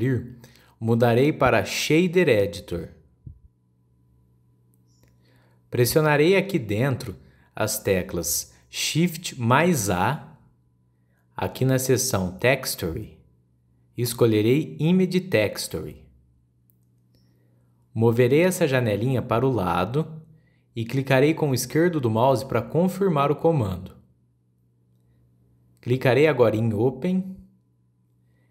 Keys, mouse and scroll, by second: 3.1-6.3 drag, 6.6-8.0 middle drag, 8.0-8.8 scroll up 4, 8.1 middle click, 8.8-9.5 middle drag, 9.5 click, 10.3 shift+a, 25.5 click, 26.1-26.5 scroll up 7, 27.8 click.